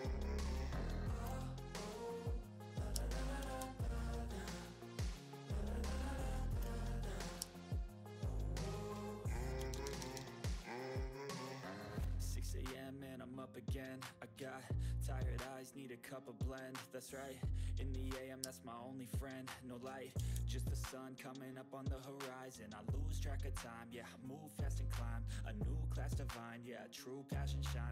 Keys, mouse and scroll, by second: 0.6 click, 1.5 shift+click, 3.5 ctrl+d, 3.8-5.5 drag, 4.5 typing, 6.2-6.9 typing, 6.4 click, 9.6 typing, 9.7 ctrl+z, 11.7 click, 15.0 click, 20.3 ctrl+d, 20.6-24.8 drag.